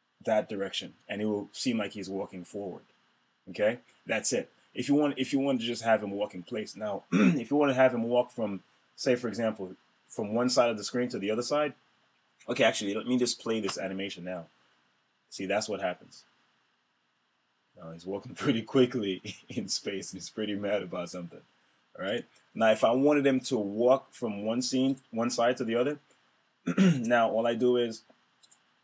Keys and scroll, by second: 13.5 super+Return.